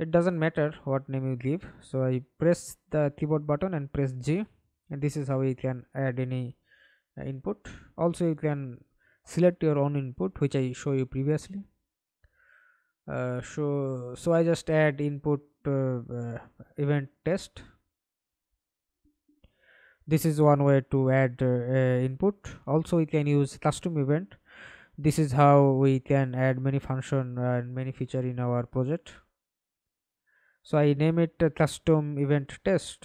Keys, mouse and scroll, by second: 0.0 ctrl+click, 2.7-3.5 g, 7.4 right click, 9.1-11.7 typing, 13.9 right click, 16.2 Delete, 17.3 right click, 18.3 right click, 19.5-20.6 typing, 21.1 Return, 26.1-30.4 typing, 30.4 Return, 31.1 right click, 31.6 right click.